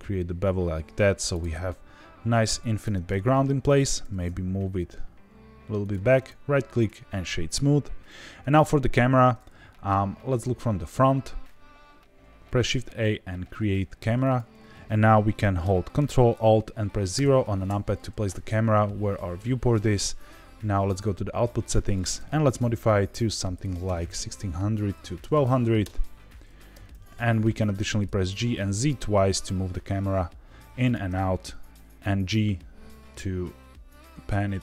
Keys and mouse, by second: 1.3 click, 1.6 middle click, 2.8 Tab, 3.6 middle drag, 4.0 g, 4.2 x, 5.8 click, 6.1 right click, 8.0-8.5 middle drag, 9.4-9.8 middle drag, 10.4-10.9 shift+middle drag, 11.4 middle click, 12.5 shift+a, 17.1 ctrl+alt+KP_0, 20.9 click, 21.7-26.2 drag, 23.9 KP_0, 25.3 KP_0, 26.7 g, 26.9 z, 27.0 z, 30.8 click, 31.0 g.